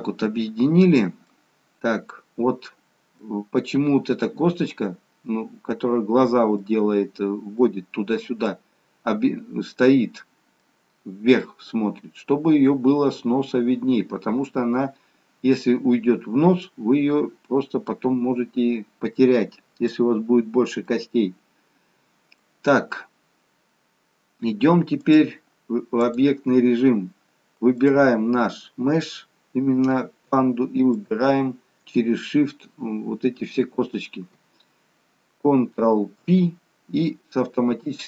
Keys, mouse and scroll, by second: 1.8 scroll up 1, 2.1 middle click, 3.7-4.1 scroll up 2, 6.1-7.1 scroll down 2, 6.5 middle click, 17.4 middle click, 20.9 middle click, 23.4-25.4 scroll down 2, 25.4 click, 30.9 shift+click, 36.2 ctrl+p.